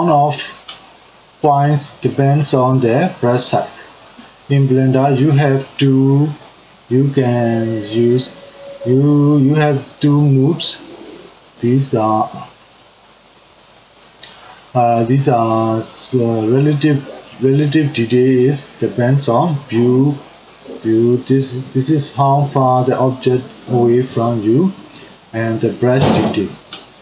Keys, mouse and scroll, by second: 26.9 click.